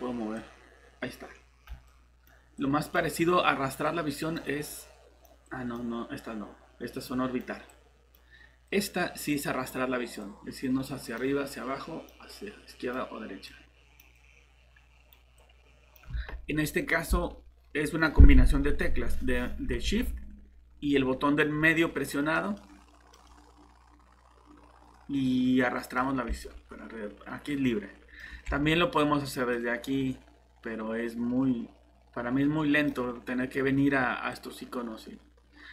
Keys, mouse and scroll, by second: 3.7-6.3 typing, 9.2 typing, 13.5 typing, 16.1 alt+Tab, 19.8-20.4 typing, 21.8 middle click, 26.8 typing, 28.4 typing, 29.5 click, 33.7 typing.